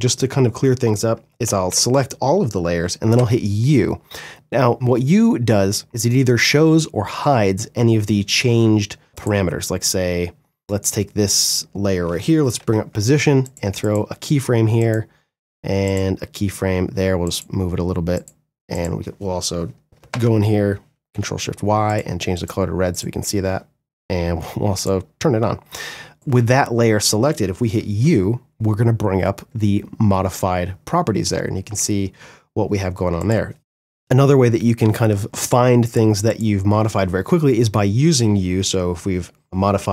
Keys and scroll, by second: 0.6 ctrl+a, 2.3 u, 11.7 p, 19.2 ctrl+shift+y, 26.9 u, 33.2 u, 39.5 r.